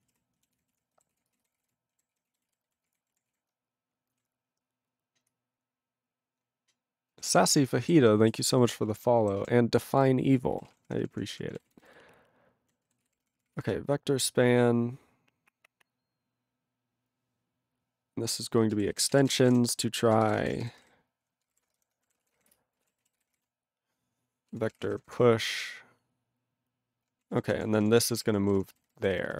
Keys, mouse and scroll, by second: 0.0 ctrl+e, 0.1 ctrl+n, 0.5 ctrl+s, 0.7 ctrl+e, 1.1 ctrl+s, 1.3 ctrl+a, 1.4 ctrl+p, 1.6 ctrl+e, 2.1 ctrl+s, 2.3 ctrl+a, 2.4 ctrl+space, 2.4 ctrl+e, 2.6 ctrl+n, 2.7 ctrl+e, 2.8 ctrl+g, 3.3 ctrl+s, 3.8 ctrl+s, 7.1 ctrl+a, 7.3 ctrl+e, 7.5 ctrl+g, 8.0 ctrl+s, 8.2 ctrl+a, 8.3 ctrl+space, 8.4 ctrl+e, 8.5 ctrl+n, 8.8 ctrl+e, 8.9 ctrl+g, 9.4 ctrl+s, 9.8 ctrl+n, 9.9 ctrl+n, 10.0 ctrl+e, 10.5 ctrl+e, 10.5 ctrl+n, 10.6 ctrl+a, 10.7 ctrl+p, 10.8 ctrl+p, 11.0 ctrl+p, 11.1 ctrl+p, 11.3 ctrl+p, 11.5 ctrl+g, 11.5 ctrl+e, 11.6 ctrl+n, 11.8-12.7 ctrl+n, 13.0 ctrl+s, 13.1 ctrl+p, 13.2 ctrl+p, 13.4 ctrl+p, 13.5 ctrl+p, 13.5 ctrl+e, 18.6-21.6 typing, 23.0 e, 23.5 r, 24.8 p, 25.1 space, 27.3 ctrl+a, 27.3 ctrl+k, 27.4 ctrl+k, 27.6-28.3 ctrl+p, 28.4 ctrl+p, 28.5 ctrl+p, 28.6 ctrl+space, 28.7 ctrl+n, 28.8 ctrl+n, 29.0 ctrl+n, 29.1 ctrl+n, 29.2 ctrl+n.